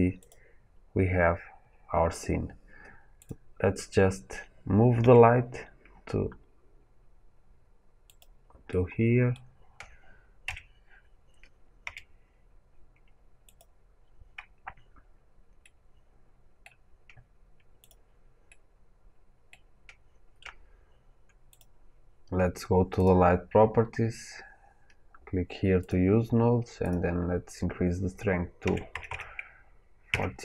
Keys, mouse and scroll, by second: 0.1 click, 3.1 click, 4.9 g, 8.1 click, 8.6-10.3 middle drag, 11.7 g, 13.5-15.5 drag, 15.5-17.8 middle drag, 17.8 click, 18.4-21.5 middle drag, 21.5 click, 25.8-30.4 drag, 30.0 KP_0, 30.1 KP_Enter.